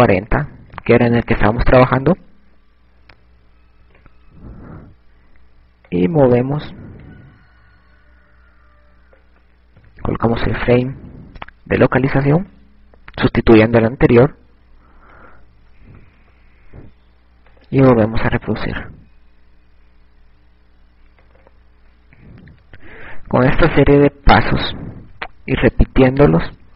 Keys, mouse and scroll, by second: 4.3 ctrl+Tab, 8.9 click, 16.7 click, 23.3 click, 24.1 KP_6, 25.2-26.7 typing.